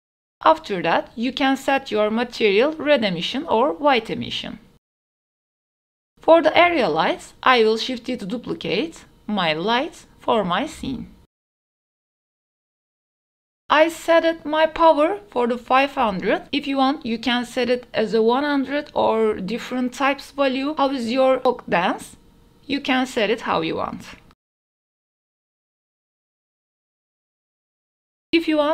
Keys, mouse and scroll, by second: 0.0 click, 0.3 Tab, 0.6 click, 0.9 l, 1.4-2.5 drag, 2.7 click, 3.0 Tab, 3.3 a, 3.5 a, 5.9 middle drag, 6.7 KP_1, 8.2 ctrl+s, 8.5 shift+d, 8.8 x, 9.2 middle drag, 9.5 drag, 9.9 middle drag, 10.4 g, 10.5 x, 11.1 click, 11.4 shift+middle click, 11.6 KP_1, 12.6 shift+middle click, 12.9-17.5 typing, 16.0 click, 19.5 r, 21.3 middle drag, 21.9 shift+d, 22.0 x, 22.3 KP_0, 22.6 ctrl+s, 24.4 a, 24.6 a.